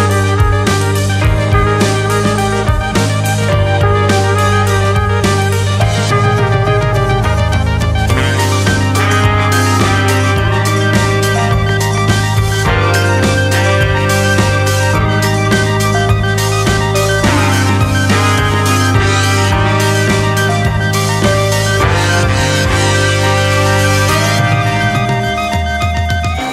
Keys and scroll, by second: 0.1 ctrl+h, 0.9 space, 1.7 space, 2.4 space, 3.3 ctrl+v, 5.3 ctrl+c, 5.4 ctrl+shift+v, 8.2 ctrl+[, 9.0 ctrl+h, 9.3 space, 10.0 space, 10.5 ctrl+v, 13.4 ctrl+v, 18.0 ctrl+[, 18.2 ctrl+space, 18.7 space, 21.4 ctrl+c, 21.5 ctrl+shift+v, 22.8 Escape, 23.2 Delete, 26.2 ctrl+v.